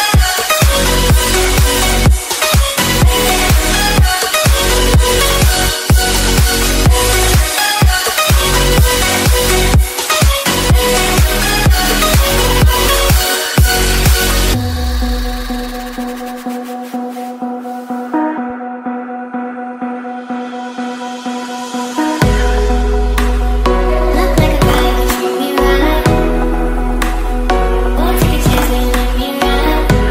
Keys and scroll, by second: 4.0 ctrl+l, 13.3 ctrl+z, 18.7 ctrl+g.